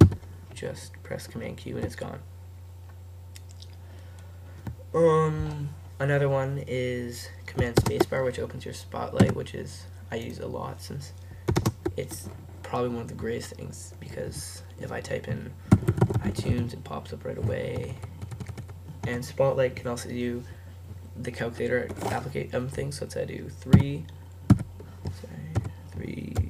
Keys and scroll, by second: 0.1 super+q, 15.9-17.1 typing, 18.2 typing.